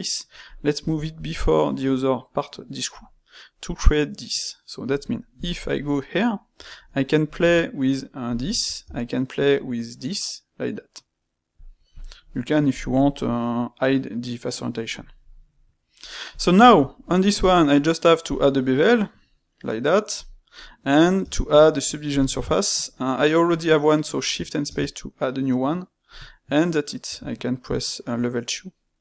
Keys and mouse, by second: 5.9-6.4 middle drag, 6.4 space, 12.7-15.3 drag, 15.3-16.3 middle drag, 16.3 click, 16.6-17.3 ctrl+shift+middle drag, 17.3 space, 20.6-23.5 middle drag.